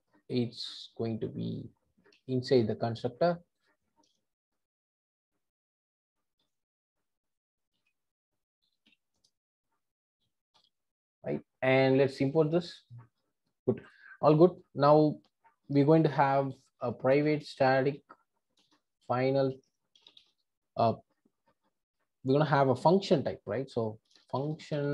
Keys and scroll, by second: 2.2 super+x, 4.0 super+c, 6.3 super+c, 7.7 super+v, 10.3 Return, 12.3 alt+Return, 18.6 Return.